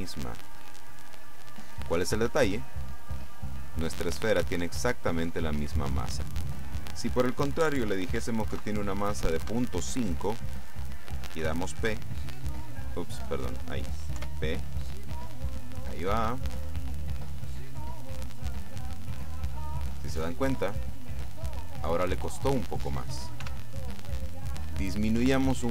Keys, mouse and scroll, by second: 0.1 right click, 1.3 right click, 3.4 right click, 6.6 click, 8.6 KP_Decimal, 9.0 KP_5, 9.5 KP_Enter, 11.5 p, 14.3 p, 23.5 Escape.